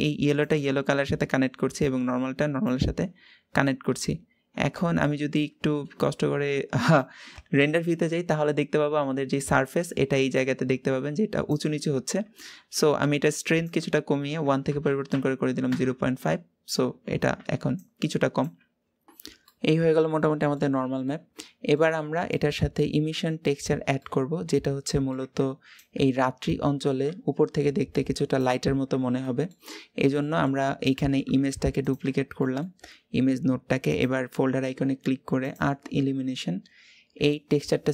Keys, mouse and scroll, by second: 0.3 click, 2.5 click, 4.6 shift+middle click, 5.0-6.7 scroll up 2, 6.7 click, 7.7-15.5 middle drag, 15.5-19.1 drag, 19.1 scroll down 1, 19.3-20.6 middle drag, 20.6 scroll down 3, 20.9 middle click, 21.7-22.1 scroll up 2, 22.1-22.9 middle drag, 22.9-23.8 scroll down 2, 23.8-29.7 middle drag, 29.7 scroll down 2, 30.7 click, 31.2 shift+d, 34.0-37.9 drag.